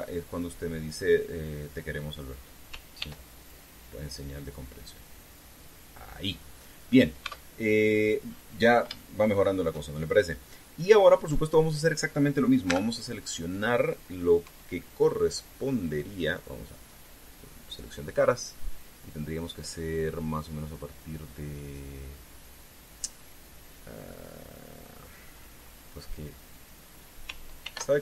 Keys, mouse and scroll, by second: 2.9 click, 3.7 ctrl+r, 4.1 ctrl+click, 6.9 click, 7.3 scroll down 2, 7.9 Tab, 8.6 scroll down 2, 9.0 scroll up 2, 9.7 shift+middle click, 12.0 middle click, 13.4 Tab, 15.2 KP_3, 17.3 click.